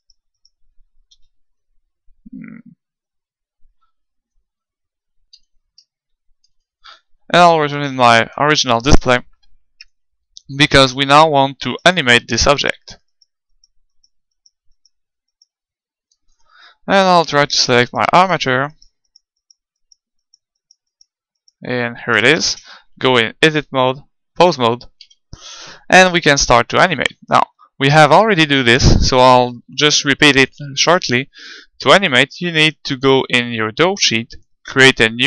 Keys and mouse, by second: 0.1-2.3 right drag, 1.1 alt+Up, 5.4 ctrl+Up, 6.2 ctrl+Up, 7.6-9.4 middle drag, 9.8-11.5 middle drag, 11.7-17.0 right drag, 16.2 click, 17.0-18.9 middle drag, 17.9-23.2 right drag, 22.5 ctrl+Tab, 23.4-25.1 middle drag, 25.1 KP_1, 25.9-30.2 middle drag.